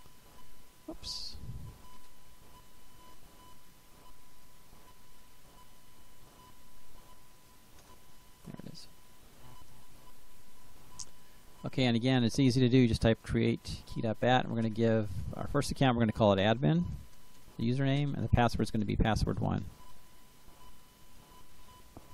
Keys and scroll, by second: 1.4-2.2 typing, 4.3 Return, 6.6-7.9 typing, 12.6 c, 13.1 e, 13.6 Tab, 14.5 space, 15.8-21.5 typing.